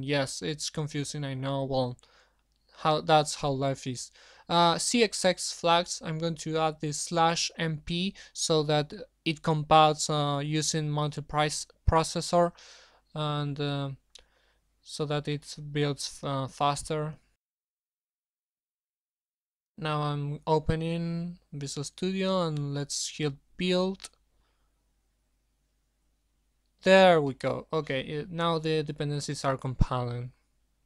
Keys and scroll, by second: 3.7-4.4 typing.